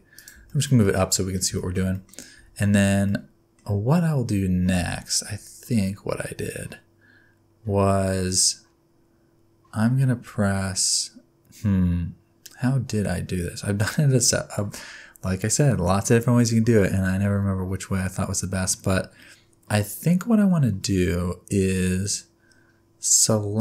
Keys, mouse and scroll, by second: 0.5 shift+middle click, 0.8 middle click, 1.4 scroll down 1, 1.4 scroll up 1, 1.6 shift+middle click, 1.9 middle click, 2.4 Tab, 3.1 middle click, 4.8 a, 17.2-17.8 scroll up 1, 17.8-18.5 scroll up 1, 18.5 scroll down 1.